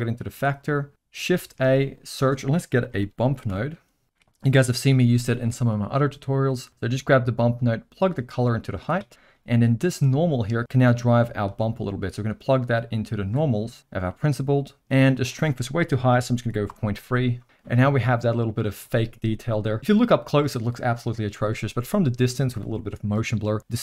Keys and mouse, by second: 0.7 middle click, 1.4 shift+a, 7.6-8.8 drag, 9.1 middle click, 10.4 middle click, 10.6-13.4 drag, 13.8 middle click, 15.1-17.2 drag.